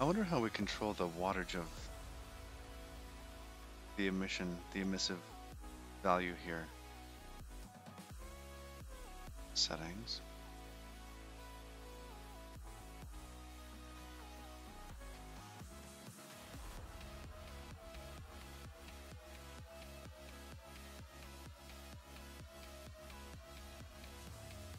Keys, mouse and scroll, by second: 0.1-3.9 scroll down 36, 5.4 click, 8.8-9.6 scroll down 11, 9.9 click, 10.4-11.2 scroll down 9, 11.9-12.6 scroll down 6, 12.6 click, 13.0-14.8 scroll down 19, 15.1 click, 15.5 scroll down 1, 16.1-17.7 scroll up 26, 18.1-19.1 scroll up 16, 23.8-24.7 scroll down 19.